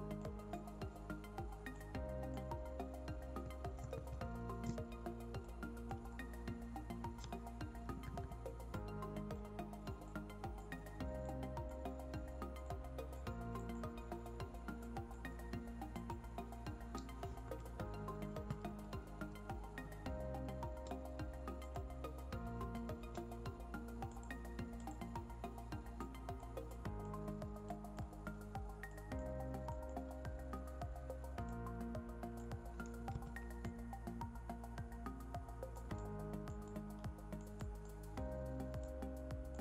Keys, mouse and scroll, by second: 3.8 ctrl+shift+z, 5.3 click, 7.7 [, 7.9 [, 8.1 [, 8.6 click, 17.3 ctrl+z, 18.4 ctrl+shift+z, 21.5 click, 22.5 ctrl+z, 24.0-32.3 drag, 33.0 ctrl+z, 33.5-35.7 drag.